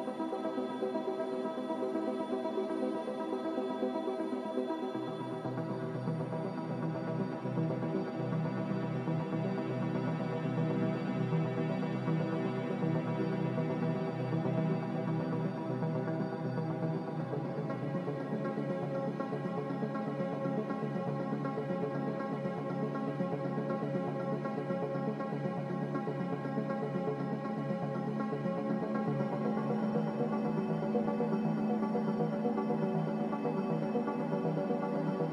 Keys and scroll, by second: 11.0 ctrl+z, 14.8 typing, 16.3 typing, 18.9 a, 26.0 g, 29.4-30.3 typing, 32.9-33.6 typing, 34.6 Return.